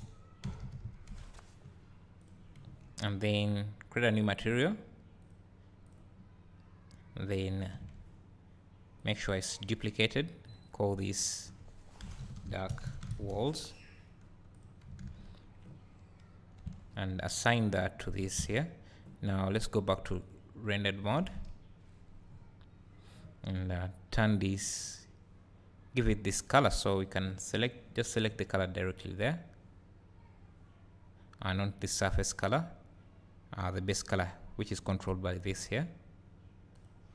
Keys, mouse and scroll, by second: 2.2 click, 2.2 l, 4.4-5.9 drag, 5.9-14.6 drag, 7.7 Tab, 16.6 Tab, 17.6-20.4 drag, 18.2 Tab, 21.4 KP_Decimal, 22.3 scroll up 1, 27.0 click, 35.3 click.